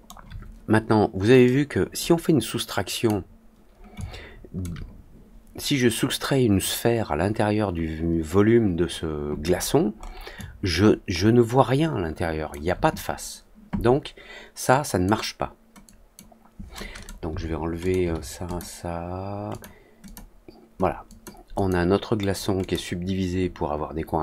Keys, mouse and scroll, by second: 1.4-3.0 drag, 3.9-4.5 alt+drag, 9.5 scroll up 1, 9.6 scroll down 1, 9.9 scroll up 1, 10.3-12.4 alt+drag, 14.6-15.0 drag, 15.8-16.1 drag, 16.9 click, 17.7 click, 18.4 click, 19.4 click, 20.0 click, 21.0 click, 21.5 click, 22.5 click.